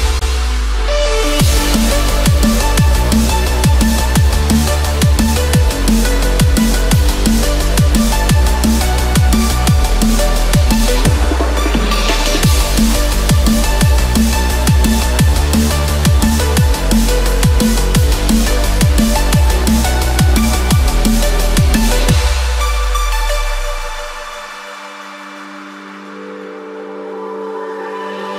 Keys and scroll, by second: 0.6 ctrl+-, 18.0 ctrl+=.